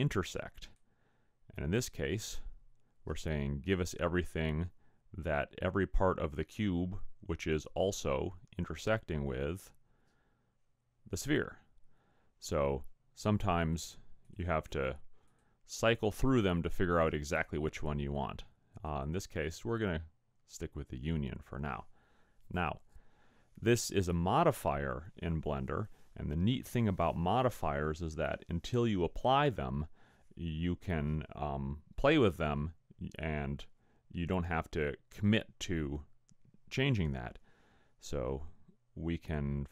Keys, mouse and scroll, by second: 13.6 click, 15.2 click, 18.9 click.